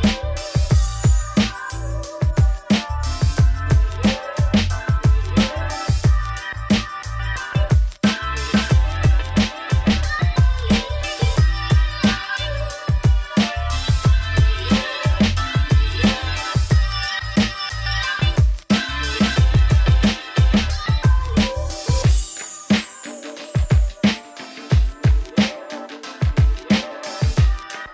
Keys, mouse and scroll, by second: 3.1 scroll down 2, 3.4 g, 4.6 click, 4.6 g, 5.8 click, 5.9 scroll down 1, 6.0-7.0 shift+middle drag, 7.0-7.9 scroll up 1, 7.9-10.7 middle drag, 10.7 shift+right click, 11.7 shift+a, 11.9 Tab, 12.1 s, 13.0 shift+middle click, 13.2 scroll up 3, 13.5 s, 15.4 KP_3, 15.8 shift+middle click, 16.0-16.4 scroll up 4, 16.4 g, 18.2 middle click, 18.3 scroll down 3, 18.5 Tab, 18.6 middle click, 19.0 KP_3, 20.8 g, 21.5 middle click, 22.2 Tab, 22.4 i, 22.5 click, 23.4 Tab, 23.6 Tab, 23.9 KP_1, 24.3 z, 24.5 shift+middle click, 24.9 click, 25.0 scroll up 3, 25.1 g, 26.9 scroll up 1, 27.0 middle click, 27.4 click, 27.6 middle click, 27.8 ctrl+b.